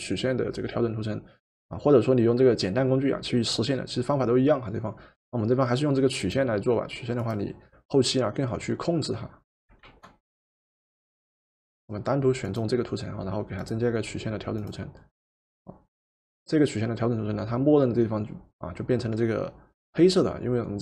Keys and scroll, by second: 9.8 ctrl+z.